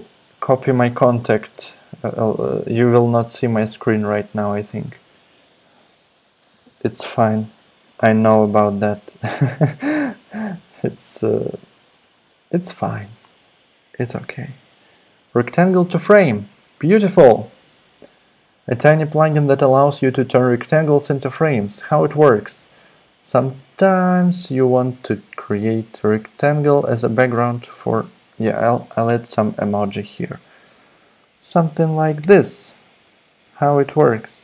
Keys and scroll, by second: 7.8 super+i, 7.8 super+c, 9.7 super+v, 29.0 ctrl+super+space, 30.7 Down, 30.9 Down, 31.3 Up, 31.6 Down, 32.2 Return, 32.5 space, 33.4 Left, 33.7 Left, 34.0 Right, 34.1 Right.